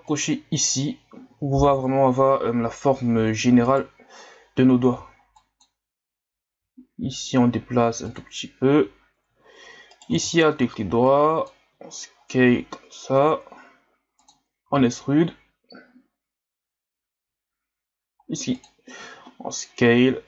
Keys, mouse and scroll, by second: 0.1 click, 3.6 right click, 4.9 b, 9.9 alt+right click, 10.4-11.1 ctrl+scroll down 2, 11.1 click, 11.7 s.